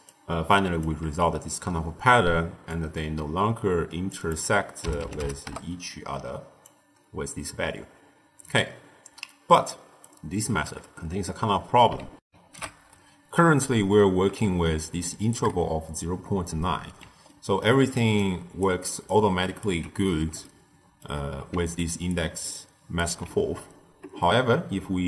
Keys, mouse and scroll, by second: 0.0-0.9 typing, 0.5 click, 2.2 d, 2.6-9.6 drag, 10.0 right click, 10.6 d, 12.2 ctrl+alt+shift+q, 14.5-18.1 shift+middle drag, 18.1 ctrl+alt+right click, 19.0 ctrl+alt+right click, 20.3-21.7 shift+middle drag, 21.7 ctrl+alt+right click, 22.5 alt+right click.